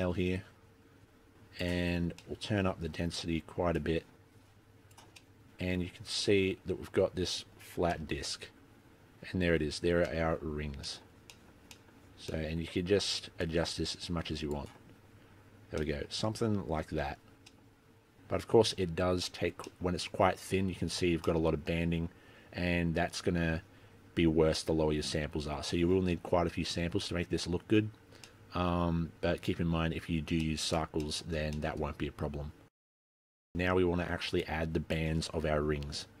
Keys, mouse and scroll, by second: 2.0-2.3 scroll down 8, 2.3 middle click, 3.1-3.6 scroll up 6, 3.9 click, 5.3 middle click, 8.1 KP_3, 9.0-10.2 scroll up 1, 10.2 middle click, 10.2-10.9 scroll up 3, 10.9 middle click, 11.5 middle click, 11.8 middle click, 12.4 middle click, 13.5 click, 15.9 middle click, 17.4 scroll down 2, 17.6 middle click, 19.7 middle click, 20.2-20.7 scroll up 2, 21.4 middle click, 24.6-24.9 scroll down 2, 26.4-26.7 scroll up 2, 27.3-28.5 scroll down 2, 28.5 middle click, 28.5-28.9 scroll up 1, 30.6 shift+middle click, 31.2 middle click, 31.7 shift+middle click, 32.8 scroll down 2, 33.0 middle click, 33.1-33.5 scroll up 4, 33.5 middle click, 33.8-34.5 scroll down 12, 33.9 middle click, 34.5 middle click, 34.7 middle click, 34.7 scroll up 3, 34.9 middle click, 35.0 middle click, 35.3 middle click, 35.3 scroll up 2, 35.6 click.